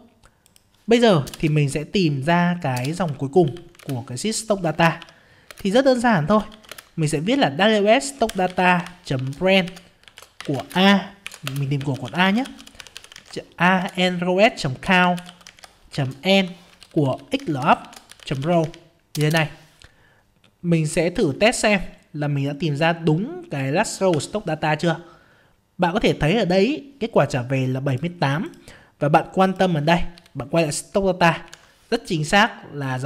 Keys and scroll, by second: 3.8 ctrl+space, 4.3 ctrl+space, 24.1 F5, 30.1 ctrl+Down, 31.5 ctrl+Up, 32.1 ctrl+Up.